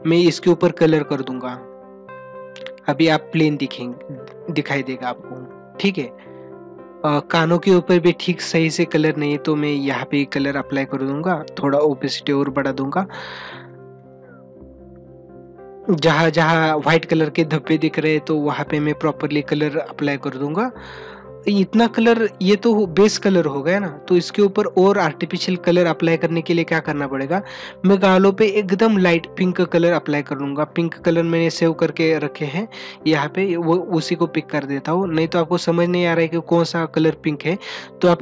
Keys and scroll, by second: 20.2 ctrl+=.